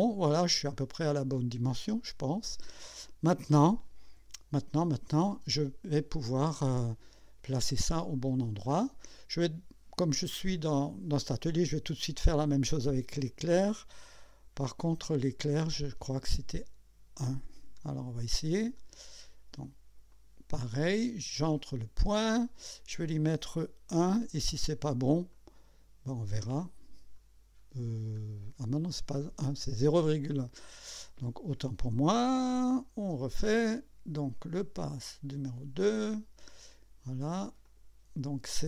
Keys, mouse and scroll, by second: 0.7-3.7 drag, 4.2 KP_1, 4.9 KP_2, 5.5 scroll up 1, 6.1-7.1 right drag, 8.5 scroll down 1, 9.0 right click, 18.8 click, 20.1 click, 21.7 click, 24.0 1, 25.3 click, 27.5-28.0 scroll down 2, 28.3-28.6 scroll up 2, 32.4 ctrl+z, 34.6 click, 36.0 click, 37.7 click.